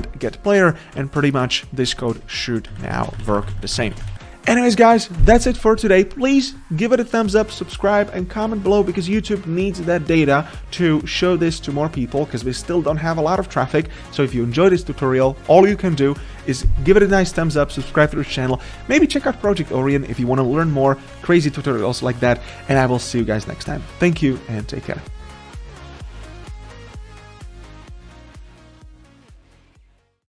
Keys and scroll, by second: 2.7 ctrl+z, 3.5 ctrl+z.